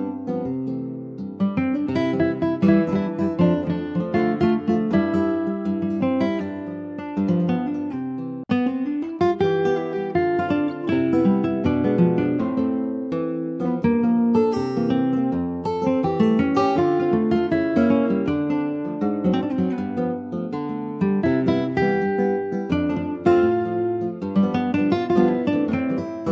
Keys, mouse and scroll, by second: 1.7-2.2 scroll up 4, 2.2-3.2 shift+middle drag, 3.2-3.8 shift+scroll up 2, 3.9-4.9 shift+middle drag, 4.9 click, 7.7 click, 8.0-8.4 scroll down 2, 8.4 shift+middle click, 9.0 ctrl+s, 9.2 middle click, 9.7 click, 10.2 shift+click, 11.2 ctrl+j, 11.5 click, 12.3 click, 12.8 shift+click, 13.7 ctrl+h, 15.0 ctrl+j, 15.4 click, 15.8 scroll down 2, 16.0 middle click, 16.4 ctrl+s, 16.5 click, 16.8-18.2 middle drag, 18.2 click, 18.4 middle click, 18.9 ctrl+s, 19.1 middle click, 19.9 ctrl+s, 20.0-21.2 middle drag, 21.2 click, 22.7 click, 23.5 ctrl+s, 24.2 click, 24.6 scroll up 2, 24.9 alt+middle click, 25.2 alt+scroll up 1, 25.7 alt+z.